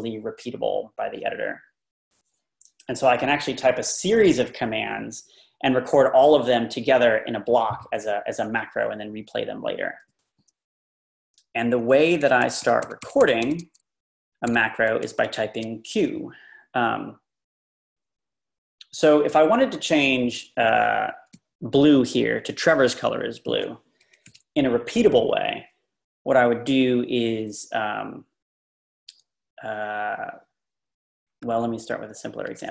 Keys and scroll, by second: 11.8 Left, 12.0 Left, 12.2 Left, 12.4 Left, 12.6 Left, 12.8 Left, 13.0 Left, 14.5 Left, 24.0 Left, 24.2 Right, 31.3 Up, 31.4 Up, 31.7 Up.